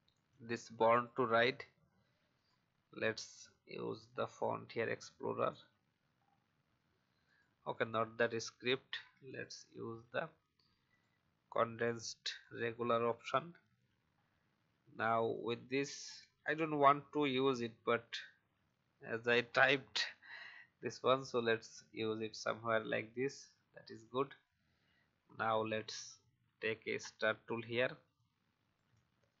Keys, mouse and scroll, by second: 0.2-1.5 drag, 2.3 right click, 4.5 click, 6.2 alt+scroll up 1, 7.2 right click, 9.2 click, 12.3 shift+click, 13.3 alt+scroll down 1, 14.1-14.9 scroll up 1, 15.3-18.8 alt+shift+drag, 19.4 alt+scroll up 1, 20.9 alt+shift+click, 22.7 right click, 23.7 click, 27.0 alt+scroll up 1, 28.1 alt+shift+click.